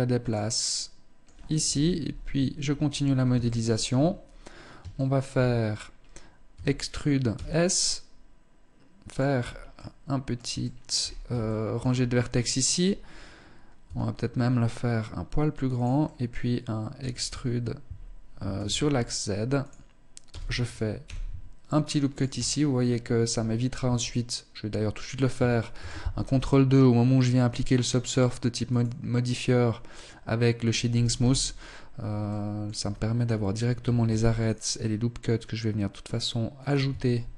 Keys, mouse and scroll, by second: 0.0 middle click, 1.0 KP_1, 1.7 Tab, 2.3-2.7 scroll up 3, 2.9 shift+middle click, 3.6-4.2 scroll down 2, 4.4 shift+middle click, 5.2-5.9 scroll up 1, 5.9 e, 8.8-9.2 scroll up 2, 9.2 middle click, 10.0 shift+middle click, 10.4-10.8 scroll up 2, 10.8 shift+middle click, 13.2 s, 15.4 click, 15.4 middle click, 16.4 e, 19.6 e, 21.8-22.8 scroll down 7, 22.6-23.0 scroll up 3, 23.2 Tab, 25.2 ctrl+2, 28.0 click, 30.6 t, 31.0-31.6 scroll up 1, 31.6 middle click, 31.6 scroll up 1, 32.2 Tab, 32.6-33.2 scroll up 1, 33.2 scroll up 1, 33.4 ctrl+r, 36.4 shift+middle click, 37.0-37.3 scroll down 4.